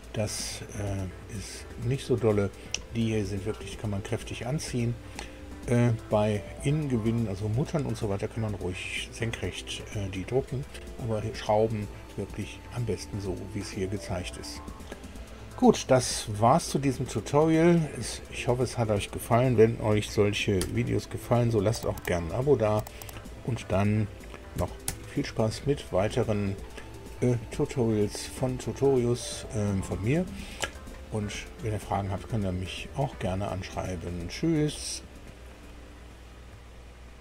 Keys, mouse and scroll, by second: 20.6 super+u, 24.8 super+i, 34.1-35.4 drag.